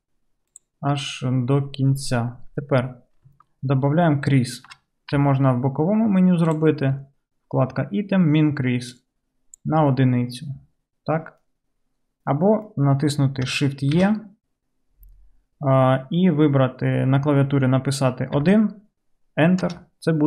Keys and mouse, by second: 5.2 n, 6.5 middle click, 6.5 right click, 9.0-20.2 middle drag, 9.0-12.0 right drag, 14.0 shift+e.